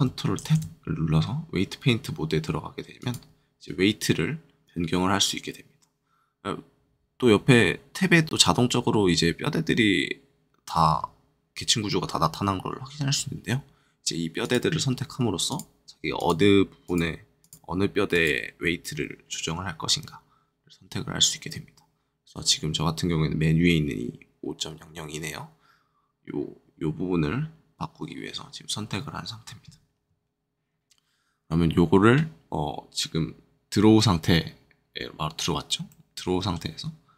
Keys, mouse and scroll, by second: 0.4 ctrl+Tab, 2.9-4.4 drag, 14.4 click, 15.4 click, 35.8 middle click.